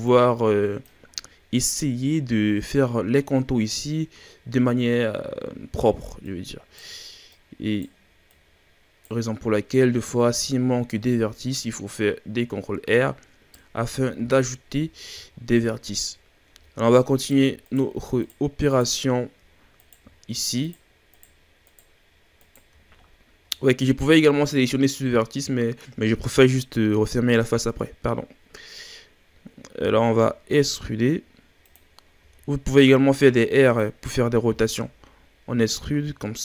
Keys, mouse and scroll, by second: 0.0-1.1 drag, 1.1-2.9 scroll down 7, 5.3-6.2 scroll up 1, 6.2 right click, 7.3 right click, 8.3 right click, 9.5-10.2 scroll up 3, 10.2 right click, 11.6 right click, 13.8 a, 14.0-14.7 scroll down 2, 14.7-15.3 scroll down 6, 15.3-15.8 shift+scroll up 7, 16.0-16.6 scroll up 5, 16.6-17.2 shift+scroll down 5, 17.2 right click, 17.6 shift+right click, 18.2 shift+right click, 18.7 shift+right click, 19.8 right click, 20.6 shift+right click, 21.1 shift+right click, 21.6 shift+right click, 22.4 shift+right click, 29.8 e, 32.2 r, 34.4 g.